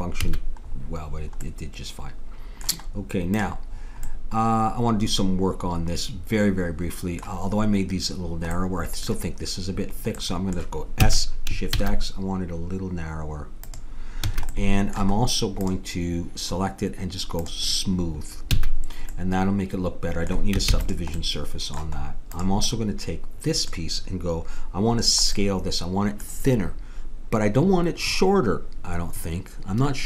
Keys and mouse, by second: 0.3 a, 1.5-3.4 middle drag, 3.4-5.0 drag, 4.1-6.0 middle drag, 5.0 right click, 8.6-11.0 middle drag, 11.0 s, 14.3 a, 14.6 middle click, 15.6-19.3 drag, 18.6 a, 20.7 ctrl+s, 22.4 click.